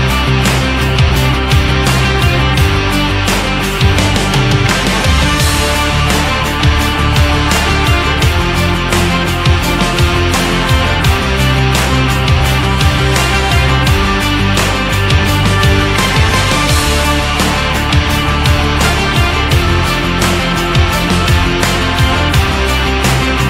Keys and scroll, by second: 16.5 Up, 17.3 Down, 19.9 Up, 22.9 Right.